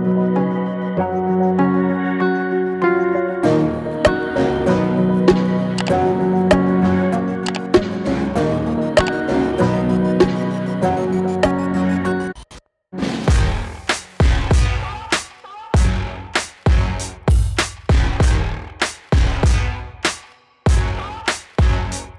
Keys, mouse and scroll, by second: 4.2-7.5 drag, 9.0-12.5 shift+drag, 12.5-13.7 drag, 13.7-15.2 drag, 15.2-16.8 drag, 16.8-21.6 drag, 21.6 space.